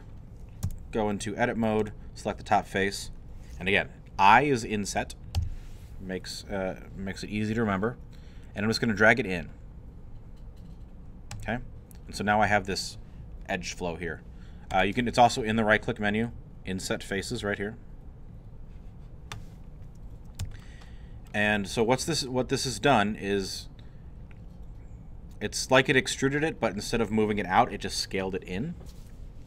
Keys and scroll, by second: 0.6 Tab, 5.4 i.